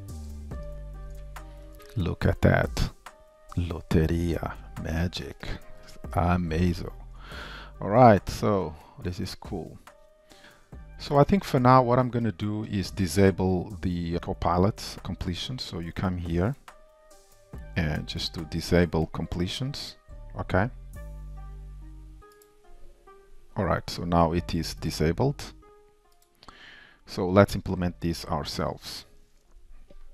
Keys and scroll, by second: 0.7 alt+\, 1.7 Tab, 6.4 ctrl+y, 6.4 super+BackSpace, 7.1 super+s, 10.4 Escape, 22.6 alt+shift+super+o.